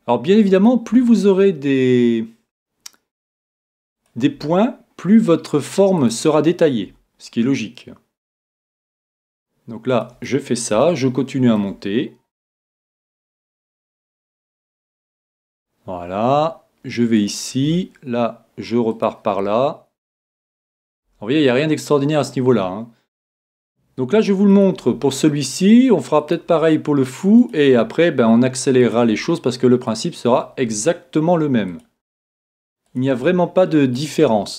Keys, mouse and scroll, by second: 4.3 e, 6.8 e, 8.4-11.8 drag, 8.6 e, 10.8-12.9 middle drag, 12.7 e, 14.3-17.1 drag, 14.3 e, 15.5 e, 17.3 click, 17.6 e, 19.4-24.0 drag, 19.4 e, 21.1 e, 22.5 e, 24.9 e, 26.5 e, 27.7 e, 30.6 e, 33.2 e, 34.2 e.